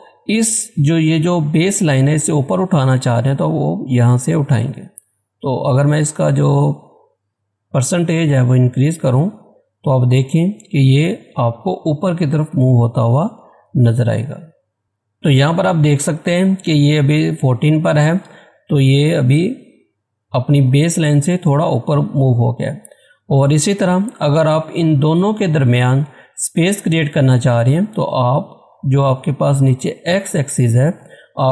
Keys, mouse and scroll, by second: 4.7 click.